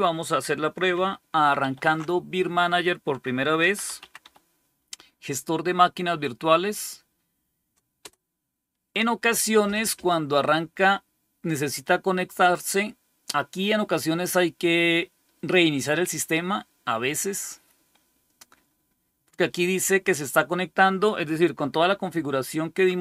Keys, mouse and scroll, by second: 1.5 alt+super+d, 3.2-4.6 typing, 7.9 Return.